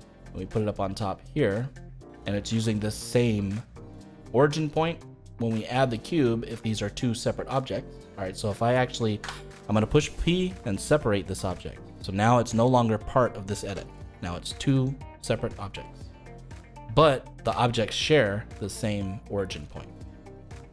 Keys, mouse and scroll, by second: 0.1-3.2 drag, 9.2 p, 13.6 Tab, 14.5 click, 15.0 click, 15.5 click, 16.1 click, 17.4 g.